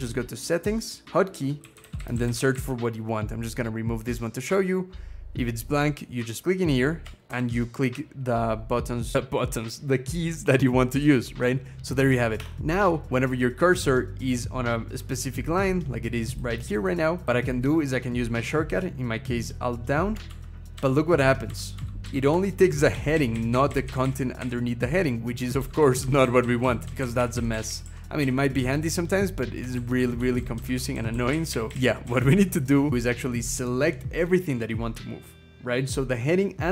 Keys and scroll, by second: 1.4-2.8 typing, 7.1 alt+Down, 12.2 Escape, 12.3 Caps_Lock, 20.1 alt+Down, 20.5 alt+Down, 21.0 alt+Down, 21.3 alt+Down, 21.6 alt+Down, 21.8 alt+Down, 22.1 alt+Down, 22.4 alt+Down, 22.7 alt+Up, 22.9 alt+Up, 23.1 alt+Up, 23.3 alt+Up, 23.5 alt+Up, 23.6 alt+Up, 23.8 alt+Up, 24.2 alt+Up, 25.6 alt+Down, 25.8 alt+Down, 26.0 alt+Down, 26.2 alt+Down, 26.4 alt+Down, 26.7 alt+Down, 26.8 alt+Down, 26.9 alt+Up, 27.0 alt+Up, 27.1 alt+Up, 27.3 alt+Up, 27.5 alt+Up, 27.6 alt+Up, 28.0 alt+Up, 29.8 alt+Down, 30.0 alt+Down, 30.1 alt+Down, 30.3 alt+Down, 30.5 alt+Down, 30.7 alt+Down, 30.9 alt+Down, 31.1 alt+Up, 31.3 alt+Up, 31.5 alt+Up, 31.8 alt+Up.